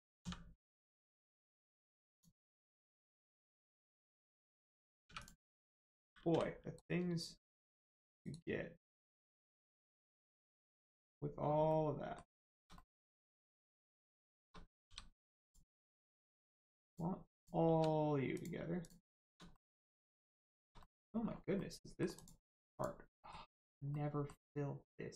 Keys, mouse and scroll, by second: 0.2 x, 2.0 click, 5.0 3, 5.2 click, 6.7 right click, 8.8 click, 10.0-10.7 scroll up 1, 10.7 click, 11.4 scroll down 1, 11.6 middle click, 12.4 shift+middle click, 12.7 middle click, 12.8 middle click, 13.5 shift+middle click, 14.8 g, 15.4 click, 16.8 shift+click, 17.3 shift+click, 18.3 click, 18.8 shift+click, 19.5 middle click, 20.4 shift+middle click, 20.8 middle click, 21.2-21.5 scroll up 1, 21.5 middle click, 22.1 click, 23.1 middle click, 23.4-23.8 scroll up 1, 23.9 middle click.